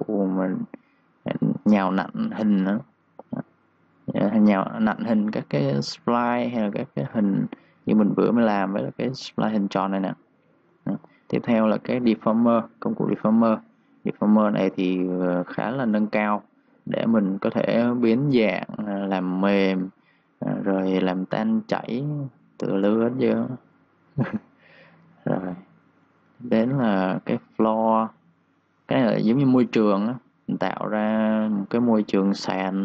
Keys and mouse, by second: 6.8-9.1 typing, 6.9 click, 8.9 click, 9.2 click, 19.4 3, 19.6 click, 19.9 3, 20.4 click, 20.6 3, 20.8 click, 21.2 3, 21.5 click, 24.2 3, 24.4 click, 24.7 3, 24.9 click.